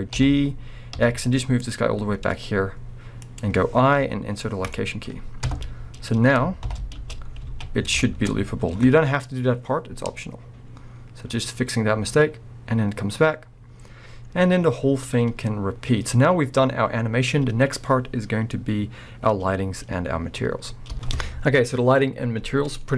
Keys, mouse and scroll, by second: 0.1 g, 5.5 KP_0, 6.7 shift+Left, 7.0 space, 7.1 space, 7.3 scroll up 2, 7.4 alt+a, 8.0 shift+middle click, 8.3 scroll up 2, 20.9 space.